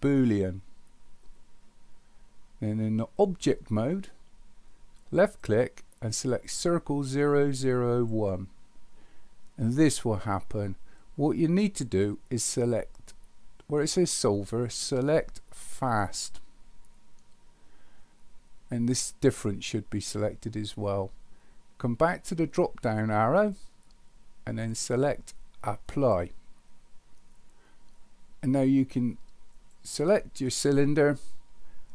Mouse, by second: 5.4-8.1 drag, 15.8 click, 23.5-26.2 drag, 29.5 click.